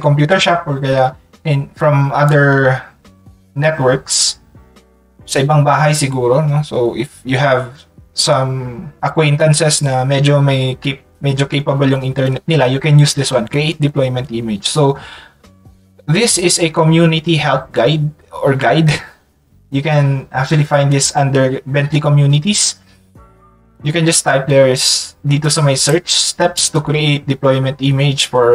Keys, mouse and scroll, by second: 2.3-3.4 drag, 7.8 click, 25.8 click.